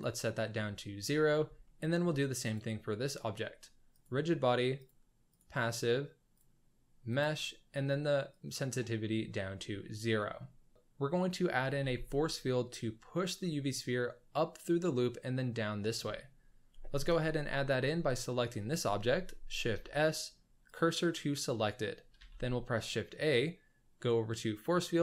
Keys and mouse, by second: 1.2 middle drag, 1.6-2.0 shift+middle drag, 3.9 click, 4.9-5.4 drag, 6.3-7.3 drag, 8.3 click, 10.4-10.7 shift+middle drag, 11.8 z, 17.0 KP_1, 18.0 click, 19.7 shift+s, 22.1 shift+a.